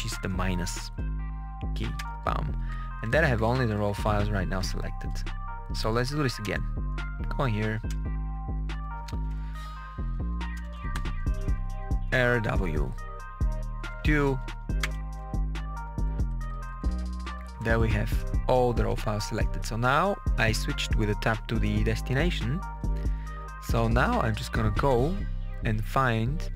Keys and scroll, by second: 0.0-0.5 typing, 1.9 Return, 2.5 Page_Down, 4.6 Page_Up, 6.3 Return, 7.8 Return, 8.9 KP_Add, 10.1 Right, 10.4 BackSpace, 11.7-13.9 typing, 14.7 Return, 15.7 Page_Down, 18.6 Tab, 22.7 Return, 23.6 alt+F2, 24.5 Down, 24.8 Return, 25.4 Down.